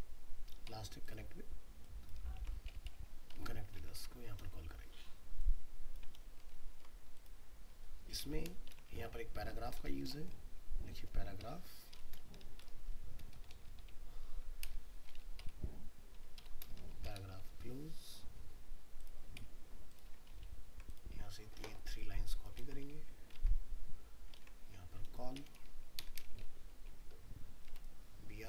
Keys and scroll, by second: 2.4 ctrl+c, 3.3 alt+Tab, 6.2 ctrl+v, 6.4 ctrl+s, 20.3 ctrl+a, 22.6 ctrl+c, 23.4 alt+Tab, 24.4 ctrl+v, 27.7 alt+Tab.